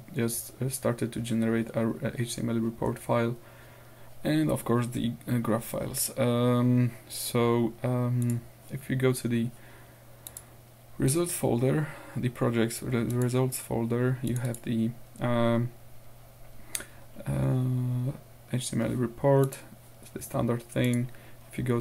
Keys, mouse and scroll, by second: 0.9-4.2 scroll down 2, 6.4-6.9 scroll down 2, 8.3 click, 10.3 click, 13.2 click, 14.3 click, 17.5-17.9 scroll down 2, 18.2-18.8 scroll up 2, 19.5 click, 20.9 click.